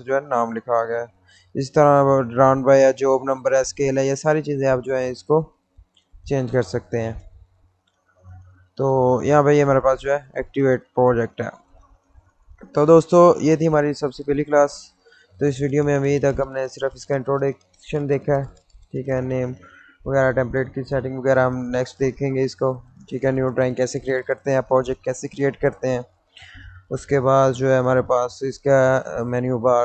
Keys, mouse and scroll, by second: 2.9 click, 4.1 middle click, 4.5-5.4 scroll down 1, 5.4 middle click, 6.3-7.0 scroll down 1, 7.0-9.7 middle drag, 9.7 click, 11.0 middle click.